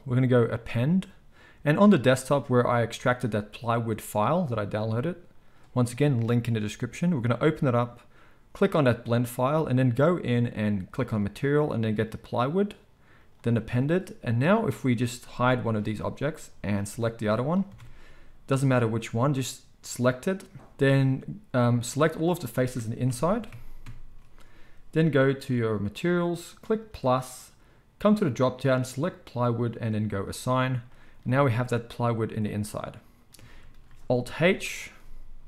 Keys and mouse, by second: 14.9-16.6 middle drag, 15.8 h, 16.6 click, 16.7-19.8 middle drag, 17.6 Tab, 20.5-22.2 drag, 23.0 ctrl+KP_Add, 25.4 click, 27.0-35.4 drag, 31.7 Tab, 34.4 alt+h.